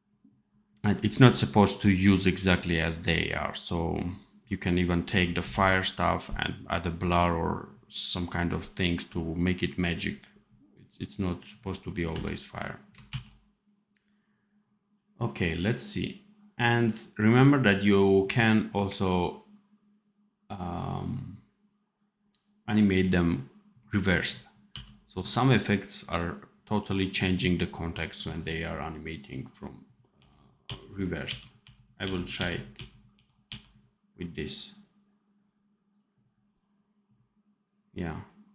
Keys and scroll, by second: 0.9 v, 12.0 v, 13.0 ctrl+z, 24.6 d, 30.0 r, 32.3 r, 33.1 r.